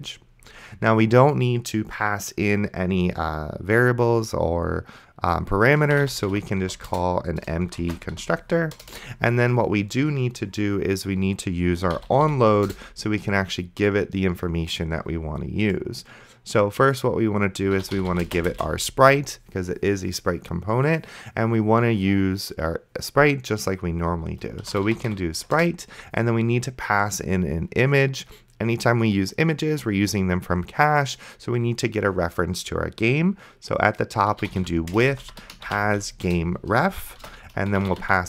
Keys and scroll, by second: 5.8-8.7 typing, 6.9 Return, 8.8 Return, 11.6-12.8 typing, 17.5-18.9 typing, 24.5-25.7 typing, 34.2-38.2 typing.